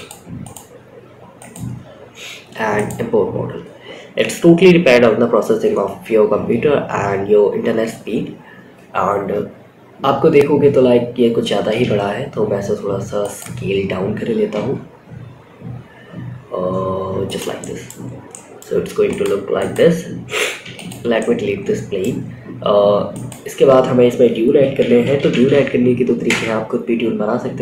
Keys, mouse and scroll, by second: 2.1-6.6 drag, 7.3-9.5 scroll down 8, 9.5-11.2 scroll down 6, 11.2 s, 12.9 scroll down 1, 13.0-13.5 scroll up 3, 13.8 s, 16.8-17.4 scroll up 3, 16.9 middle drag, 17.6-17.9 middle drag, 18.4 click, 18.9 click, 19.9 x, 20.5-21.3 middle drag, 21.6 scroll up 1, 22.4-25.6 drag.